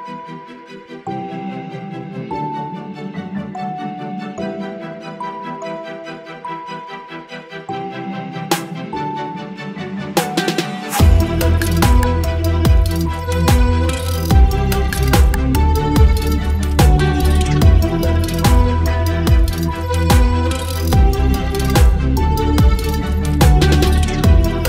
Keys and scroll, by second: 0.1 space, 1.0 ctrl+BackSpace, 1.3 space, 2.4 ctrl+BackSpace, 2.6 space, 3.8 Delete, 3.9 space, 6.1 ctrl+BackSpace, 6.9 ctrl+BackSpace, 7.4 space, 7.9 space, 9.0 ctrl+BackSpace, 11.0 Delete, 12.5 Delete, 13.7 ctrl+BackSpace, 14.3 space, 14.9 space, 15.5 space, 15.9 v, 17.1 ctrl+t, 18.4 Return, 21.1 Delete, 22.1 space, 23.9 v, 24.3 space.